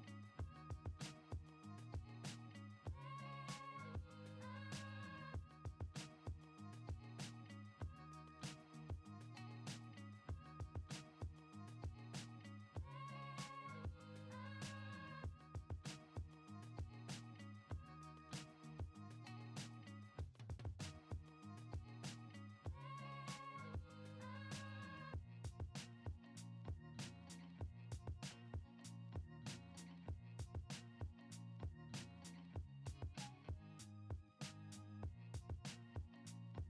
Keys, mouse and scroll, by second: 1.6-3.1 drag, 3.6 shift+a, 8.3-9.0 drag, 9.6-12.4 drag, 13.1-14.9 drag, 16.3 click, 17.2 click, 22.5 click, 31.5 middle drag, 31.7-32.0 drag, 32.5 shift+a.